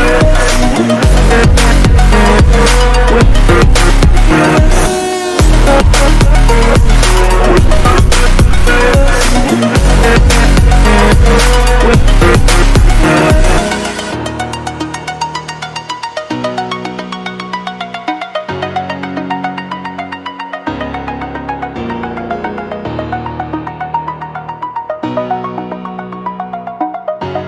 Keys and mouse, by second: 0.0 click, 3.3 click, 3.5-4.3 typing, 4.8 click, 6.8 shift+click, 7.5 click, 8.9 Down, 9.0 Down, 9.2 Down, 10.1 shift+click, 12.6 Return, 13.4 click, 16.5-17.5 drag, 21.9 click, 26.0 click.